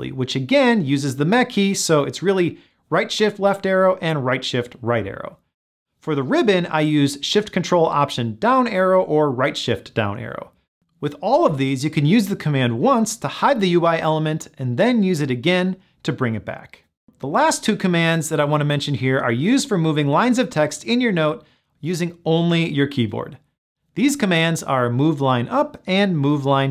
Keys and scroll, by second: 7.8 ctrl+alt+shift+Down, 9.4 ctrl+alt+shift+Down.